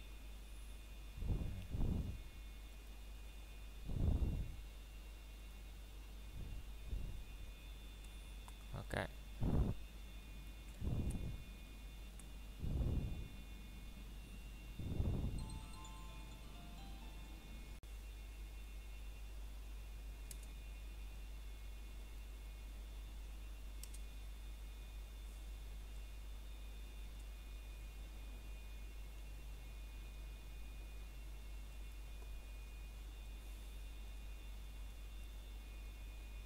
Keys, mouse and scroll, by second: 0.8 click, 1.4 middle click, 1.6 scroll down 1, 2.2 shift+middle click, 3.1 scroll up 1, 3.8 middle click, 4.4-4.7 scroll up 1, 5.1 middle click, 8.0 scroll up 1, 8.8 middle click, 9.8 click, 10.2 middle click, 11.1-12.1 scroll up 1, 12.6 alt+shift+click, 13.2 middle click, 14.7 alt+shift+click, 15.1 middle click, 15.5 scroll up 1, 16.1-16.4 scroll down 1, 16.4 ctrl+b, 18.3 click, 18.4 scroll down 1, 18.6 middle click, 19.5-20.9 scroll up 1, 20.9 click, 21.5 middle click, 21.9 scroll down 1, 23.0 middle click, 23.0 scroll up 1, 23.8 click, 24.1 middle click, 25.2 scroll down 1, 25.8 middle click, 26.9-27.4 scroll down 1, 27.4 middle click, 27.7-28.5 scroll up 1, 28.5 middle click, 29.9 shift+middle click, 30.3-31.2 scroll up 1, 32.5 middle click, 33.0-34.9 scroll up 1, 36.4 click.